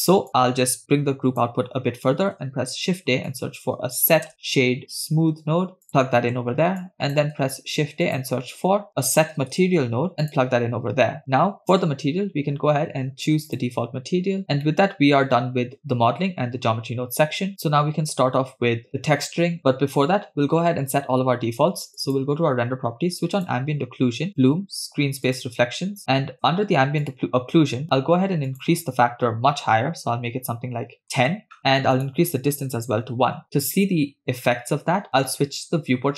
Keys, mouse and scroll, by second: 0.3-1.5 drag, 2.2 shift+a, 6.0 middle click, 7.1 click, 7.4 shift+a, 11.7-13.7 drag, 14.4 scroll down 4, 14.7 middle click, 22.0 click, 23.5 click, 24.4 drag, 25.3 click, 27.1 click, 28.6-31.3 drag, 32.0 click, 33.7-34.7 scroll down 2.